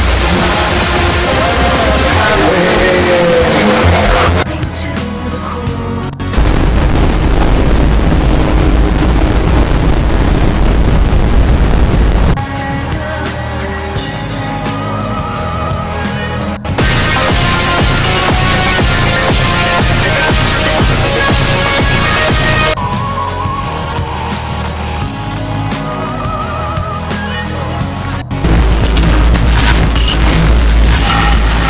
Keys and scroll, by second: 4.4 Page_Down, 12.3 Page_Down, 22.8 Page_Down.